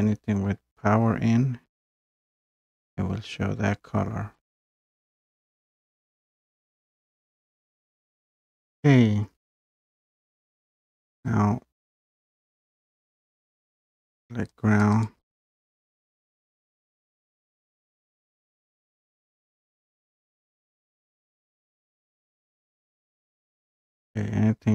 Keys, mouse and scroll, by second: 0.1 scroll up 1, 1.6-1.9 scroll down 1, 2.8 scroll down 1, 3.0 scroll up 3, 4.5 scroll down 3, 11.2 click, 13.9 click, 14.8 click, 15.0 click, 15.3 click, 21.9 click, 23.4 click.